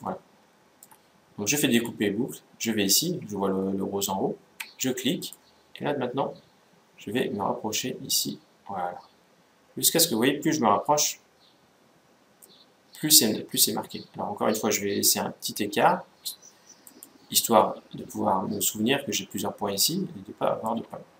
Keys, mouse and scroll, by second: 1.4-3.2 drag, 17.3-19.0 middle drag.